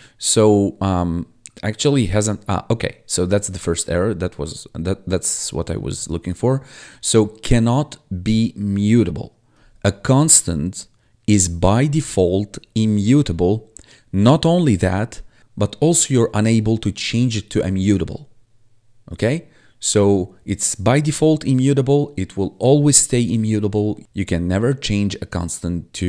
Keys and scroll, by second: 3.6 1.